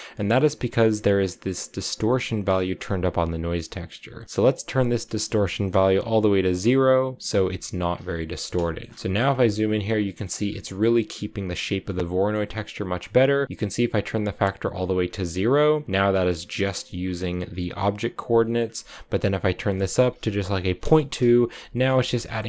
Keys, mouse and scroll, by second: 2.2-3.4 scroll up 1, 3.4-5.0 scroll up 1, 5.3-7.8 drag, 7.8-8.4 scroll down 4, 8.4 shift+middle click, 8.7-9.4 scroll up 9, 8.9 shift+middle click, 9.4-9.8 scroll down 4, 9.8 middle click, 10.1-10.5 scroll up 4, 10.5 click, 12.0 middle click, 12.7-14.2 drag, 14.2-15.8 scroll down 5, 15.8-16.3 scroll down 1, 16.3 click, 16.7-17.2 scroll down 5, 17.2-17.9 scroll up 1, 17.9-19.5 scroll up 2, 18.2 shift+middle click, 19.5-21.5 drag, 21.5-22.4 shift+scroll up 9, 21.5 shift+middle click, 22.1 shift+middle click.